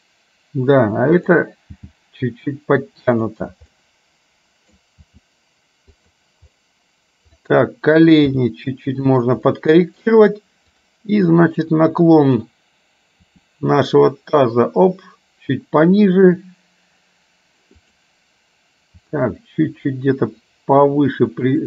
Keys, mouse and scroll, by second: 2.0 g, 3.8-4.8 middle drag, 5.1 g, 8.3 g, 9.6 middle click, 10.1-10.8 scroll down 1, 10.8 click, 11.3 middle click, 13.5 r, 17.8 click, 19.0 r.